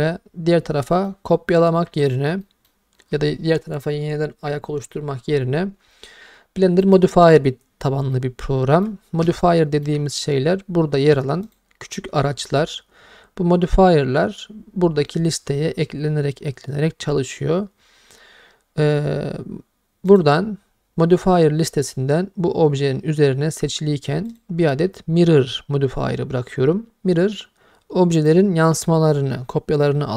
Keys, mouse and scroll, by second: 0.9 middle click, 1.9 Tab, 2.4 middle drag, 6.8 click, 8.1 middle click, 9.4-9.9 ctrl+middle drag, 11.5-15.0 drag, 20.1-22.2 drag, 24.3-28.3 drag.